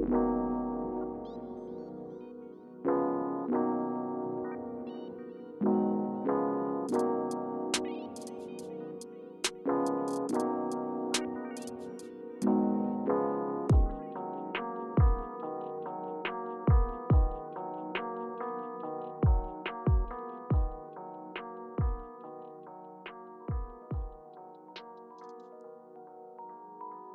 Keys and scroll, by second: 0.1 Return, 7.3 BackSpace, 8.0 Return, 16.7-17.8 typing.